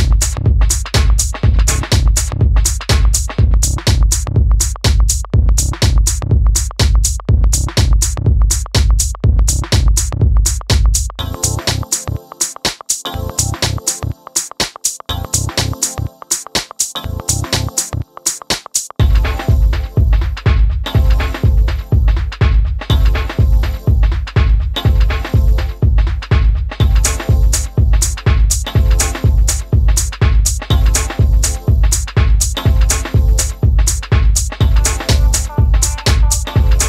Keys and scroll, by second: 10.0 super+c, 10.1 super+v.